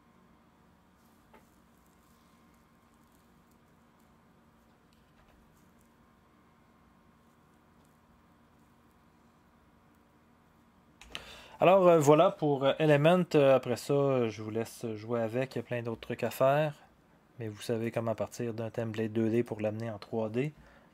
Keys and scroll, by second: 5.2 0, 11.0 0.